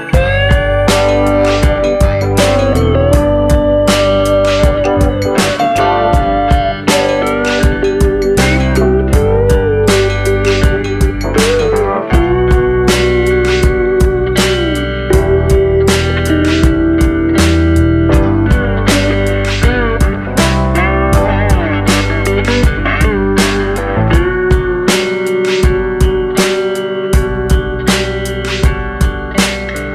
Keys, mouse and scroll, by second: 1.0-2.2 scroll up 4, 2.3 shift+click, 3.1 shift+f, 4.7 click, 5.4 click, 6.2 shift+f, 7.9 click, 8.6 click, 9.0 click, 10.0 click, 10.9 click, 11.4 click, 11.9 click, 12.3 click, 12.6 click, 13.2 click, 13.5 click, 14.0 click, 14.4 click, 14.6-15.0 scroll down 5, 15.0 middle click, 16.3-16.6 scroll up 2, 16.7 click, 19.1 click, 21.6 click, 24.6 click, 25.2 click, 25.8 click, 28.9 click, 29.6 click.